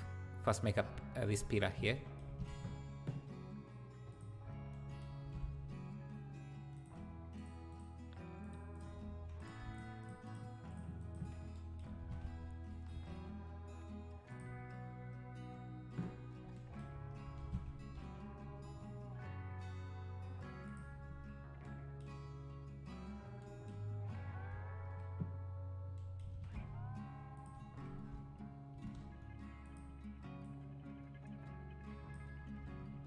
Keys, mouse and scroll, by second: 1.4 shift+click, 2.3 alt+d, 5.2 alt+d, 7.4 shift+click, 7.7 shift+click, 8.4 shift+click, 8.7 shift+click, 9.4 click, 9.8 shift+click, 10.0 shift+click, 10.2 shift+click, 12.0 alt+d, 17.4 alt+d, 24.0-24.5 scroll down 1, 26.3 alt+d, 28.7 ctrl+m, 30.4 Left.